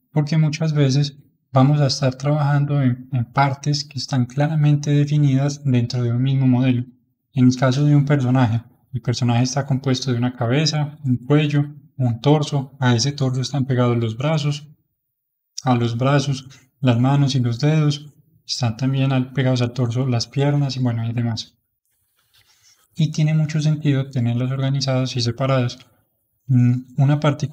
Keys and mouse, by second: 25.1-27.5 middle drag.